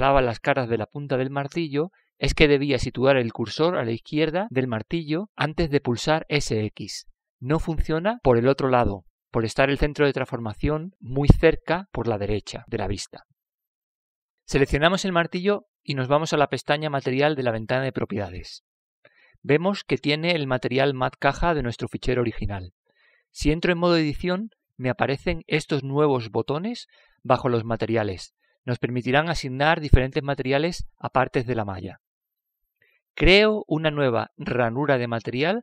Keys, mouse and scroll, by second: 0.0-1.8 drag, 3.7-5.7 drag, 17.3-19.4 right drag, 19.6-21.4 drag, 23.9-25.8 drag, 25.5 Tab.